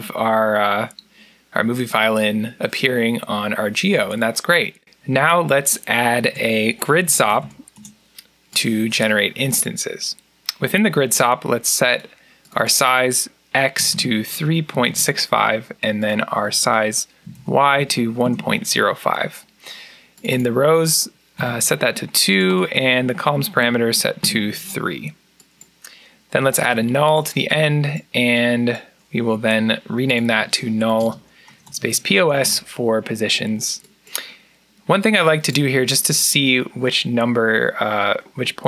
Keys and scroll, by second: 6.1 Tab, 6.5-7.7 typing, 9.0-9.8 typing, 13.5-15.0 typing, 16.9-17.7 typing, 18.1 Return, 21.0-21.7 typing, 22.9-23.9 typing, 24.0 Return, 26.4 alt+n, 30.7-32.3 typing, 32.4 Return, 33.5-34.3 typing.